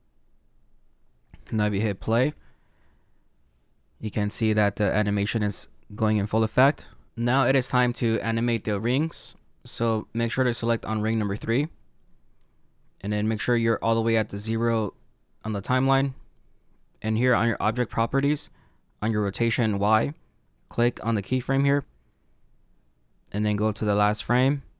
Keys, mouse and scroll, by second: 1.4 space, 11.3 click, 21.3 click, 23.9 click.